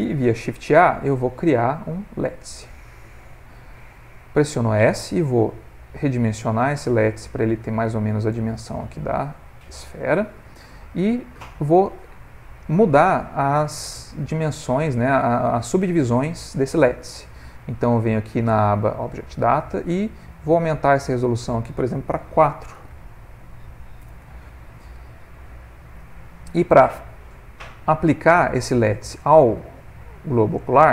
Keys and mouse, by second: 0.6 shift+a, 4.3 s, 12.4 click, 14.2 middle click, 15.1 middle click, 21.2 click, 25.2 middle click, 26.2 ctrl+middle click, 27.0 middle click, 29.1 click.